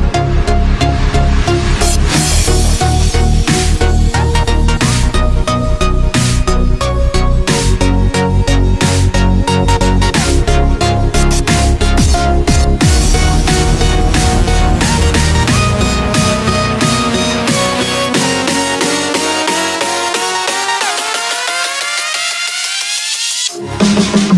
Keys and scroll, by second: 0.0 space, 0.4 x, 2.2 z, 2.6 space, 3.0 x, 4.1 x, 4.3 space, 5.0 x, 5.7 ctrl+z, 7.2 z, 7.9 x, 8.3 space, 10.3 space, 13.2 space, 13.6 z, 17.9 space, 18.3 x, 20.8 space, 21.0 x, 23.0 space, 23.5 ctrl+0.